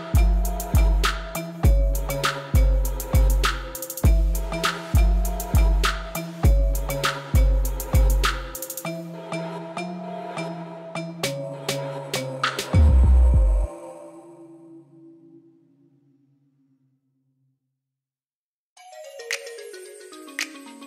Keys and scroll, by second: 8.6 shift+s, 9.5 shift+a, 10.6 g, 10.7 y, 11.4 Tab, 12.4 x, 13.5 ctrl+r, 13.8 7, 14.0 Return, 15.5 7, 15.7 Return, 17.3 ctrl+b, 18.2 Return, 18.6 ctrl+-.